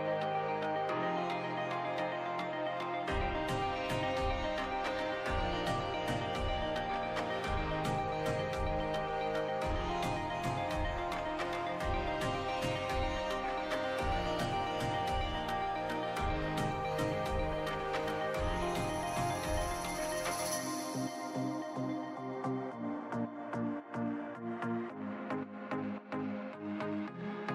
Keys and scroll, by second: 12.9 ctrl+z, 14.4 ctrl+z, 15.7 ctrl+z, 17.9 ctrl+z, 24.3 ctrl+z, 25.2 Delete.